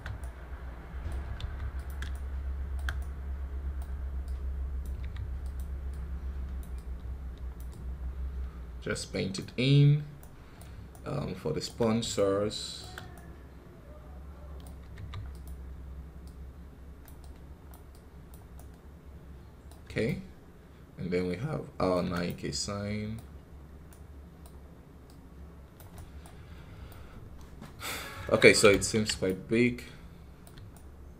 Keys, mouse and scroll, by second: 1.2 f, 2.0-4.1 shift+right drag, 4.1 click, 4.9 f, 5.8-10.1 drag, 10.1-14.8 right drag, 14.8 f, 16.1-18.4 drag, 18.4-24.9 right drag, 24.9 click, 25.8 right click, 26.4 scroll down 1, 26.7-27.8 middle drag, 27.8-28.5 scroll up 5, 27.9 middle click, 28.1 KP_1, 28.6 ctrl+z, 29.1-31.1 right drag.